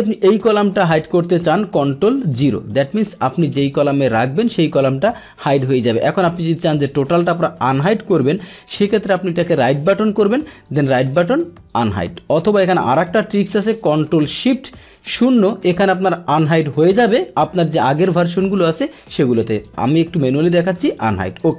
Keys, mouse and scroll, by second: 0.1 click, 2.3 ctrl+0, 3.6 click, 4.0 click, 4.4 click, 7.9-9.1 drag, 10.7 right click, 11.7 click, 13.0 ctrl+z, 15.1 ctrl+shift+0, 19.6-20.5 right drag, 20.7 click, 21.4 click.